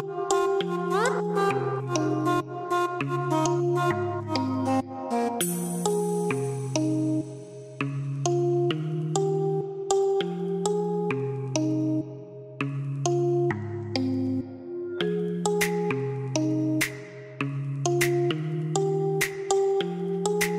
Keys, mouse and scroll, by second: 7.7-11.7 middle drag, 12.0-19.4 drag.